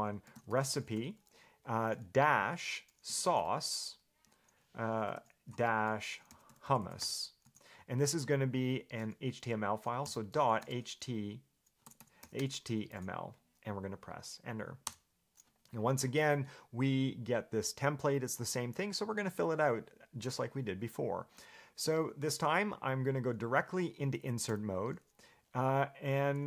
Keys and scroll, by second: 0.2-8.1 typing, 10.2-13.6 typing, 15.1 Return, 24.7 i.